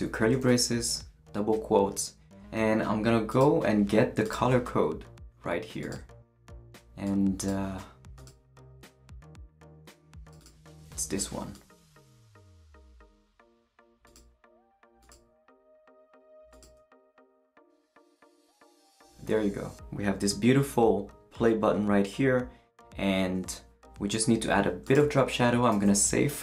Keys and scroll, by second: 0.0-0.4 typing, 10.7 super+c, 17.0 super+v, 25.7 super+s.